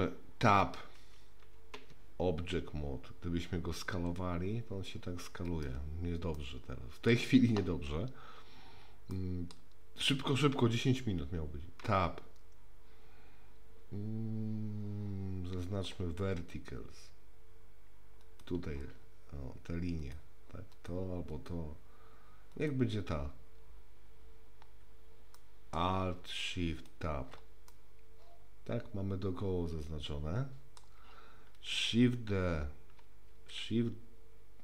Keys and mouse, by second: 1.8 Tab, 4.1 s, 6.4-7.1 middle drag, 9.2 middle click, 11.8 Tab, 18.2 click, 20.0 click, 20.7 click, 21.3 click, 22.5 click, 25.3 middle click, 26.7 shift+click, 27.7-30.8 middle drag, 33.3 shift+d.